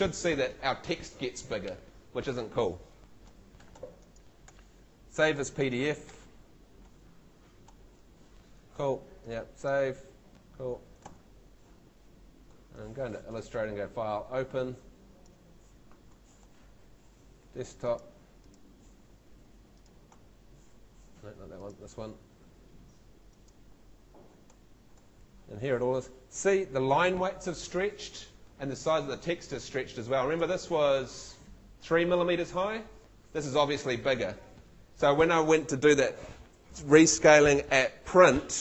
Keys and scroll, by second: 11.7 shift+super+Tab.